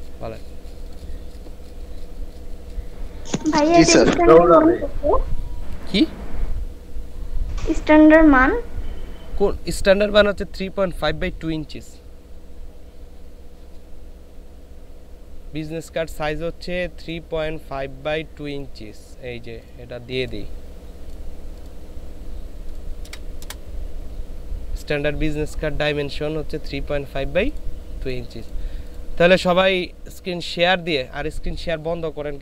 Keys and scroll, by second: 23.1 ctrl+v, 23.5 ctrl+Return.